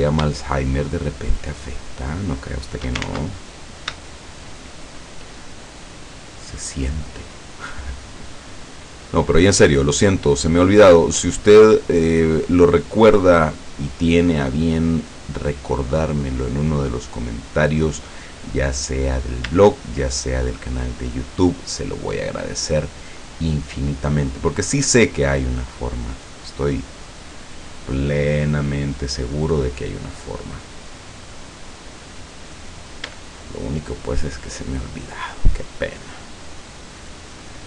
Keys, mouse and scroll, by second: 1.3 shift+right click, 2.3 shift+right click, 3.7 scroll up 2, 4.1 shift+middle click, 5.3 shift+middle click, 6.3 shift+right click, 7.2 shift+right click, 8.3 shift+right click, 9.3 shift+right click, 10.3 shift+right click, 11.3 shift+right click, 12.0 shift+right click, 12.7 shift+right click, 13.3 shift+right click, 14.1 shift+right click, 15.0 shift+right click, 15.9 shift+right click, 16.8 shift+right click, 17.9 shift+right click, 18.9 scroll down 2, 20.2 shift+right click, 21.1 shift+right click, 22.2 shift+right click, 23.0 shift+right click, 23.4 shift+middle click, 24.6 shift+right click, 25.1 shift+middle click, 25.5 shift+middle click, 26.5 middle click, 26.9-29.2 middle drag, 29.7 middle click, 30.6 scroll down 1, 31.0-32.5 middle drag, 32.7-33.0 scroll up 1, 33.3 shift+middle click, 35.1 shift+right click, 36.0 shift+right click, 37.0 shift+right click.